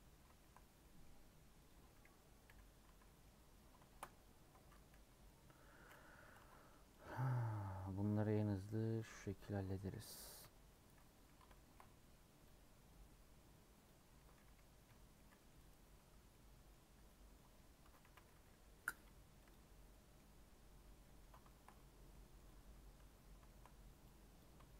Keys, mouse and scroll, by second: 1.6 click, 2.4 /, 2.8 Tab, 3.0 middle click, 3.2 scroll up 3, 3.6 scroll down 1, 3.8 shift+middle click, 4.9 KP_1, 5.3 KP_3, 6.1 3, 6.3 alt+z, 8.9 click, 9.2-10.4 scroll up 3, 10.4 ;, 11.2 3, 11.5 shift+middle click, 11.9 scroll down 2, 13.8 click, 14.8 ;, 15.1 middle click, 15.8 scroll down 1, 16.3 middle click, 16.8 scroll up 1, 16.9 Tab, 17.3 scroll down 1, 17.3 middle click, 17.8 Tab, 18.0 a, 18.4 i, 19.5 u, 19.8 middle click, 20.8 scroll up 2, 20.9 middle click, 21.8 scroll up 1, 22.1 middle click, 22.9 3, 23.0 scroll up 2, 23.5 shift+middle click, 24.3 click.